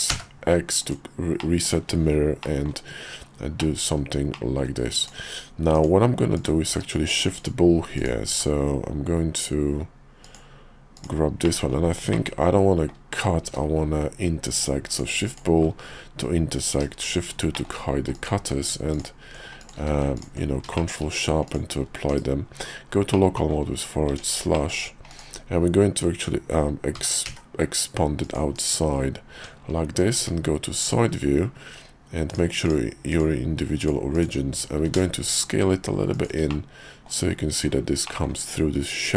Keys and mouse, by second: 0.8 click, 1.4 middle click, 2.4 middle click, 3.6 middle click, 4.3 middle click, 5.0 click, 5.7 click, 6.3 click, 6.7 q, 7.9 click, 8.3 q, 11.4 middle click, 12.1 middle click, 13.4 q, 17.0 shift+2, 17.5 middle click, 18.1 click, 18.4 q, 19.6 click, 19.8 q, 20.7 shift+middle click, 21.5 click, 22.1 /, 23.1 middle click, 24.1 Tab, 24.5 middle click, 25.1 click, 26.9 g, 28.5 /, 29.3 Tab, 30.2 `, 30.8 KP_5, 31.1 KP_5, 32.3 click, 32.6-33.9 drag, 34.1 click, 34.8 s, 36.5 middle click, 38.0 middle click, 38.5 KP_5.